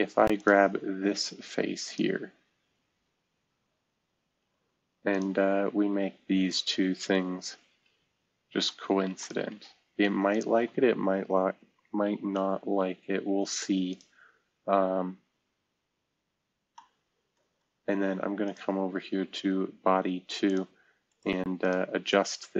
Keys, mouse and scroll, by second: 0.9 scroll down 1, 2.3 scroll down 1, 2.9-3.4 scroll down 1, 3.4 scroll up 2, 6.9-7.4 scroll up 2, 8.1 Escape, 12.6 c, 15.5-16.0 scroll down 1, 16.0-16.7 scroll up 2, 18.4-20.0 drag, 20.7-22.5 drag.